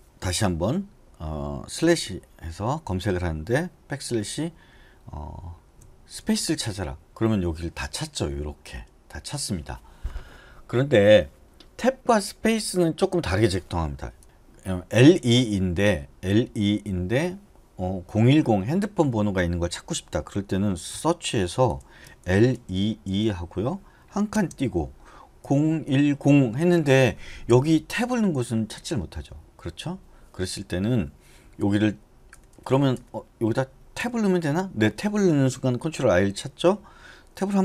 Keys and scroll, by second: 2.0 /, 4.2 \, 6.4 s, 14.2 BackSpace, 21.1-22.9 typing, 24.5-27.0 typing, 32.5 BackSpace, 32.7 BackSpace, 32.9 BackSpace, 33.2 BackSpace, 34.2 Tab.